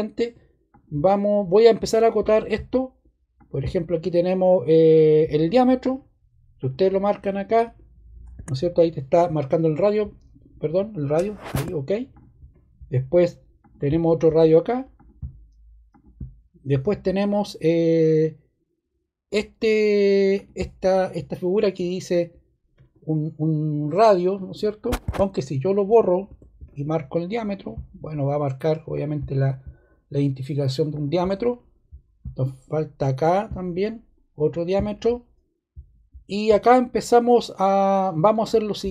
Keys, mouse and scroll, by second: 6.5 click, 8.3 ↺, 11.4 ↺, 13.5 click, 14.9 click, 15.8 click, 20.3 click, 26.2 BackSpace, 35.1 scroll.